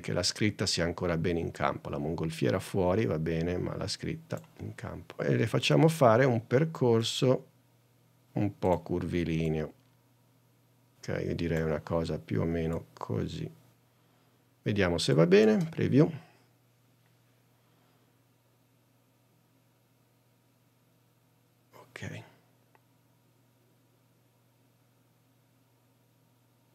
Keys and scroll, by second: 16.0 space.